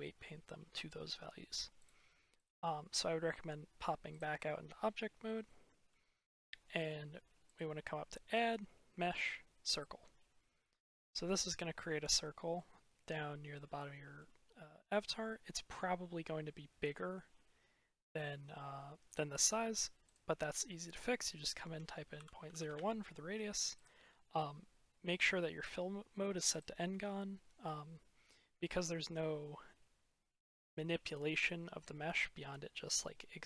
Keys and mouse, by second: 1.8 click, 4.0 click, 5.3-5.8 shift+middle drag, 6.2 middle click, 7.4-10.2 drag, 10.7-11.1 shift+middle drag, 11.8-12.4 shift+middle drag, 13.5-14.0 middle drag, 20.0-22.8 drag, 23.6-26.5 drag.